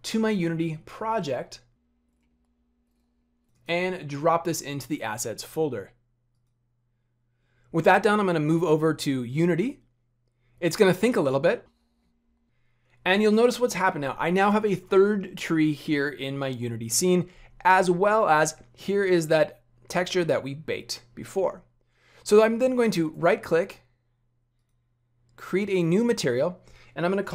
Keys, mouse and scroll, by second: 6.7 click.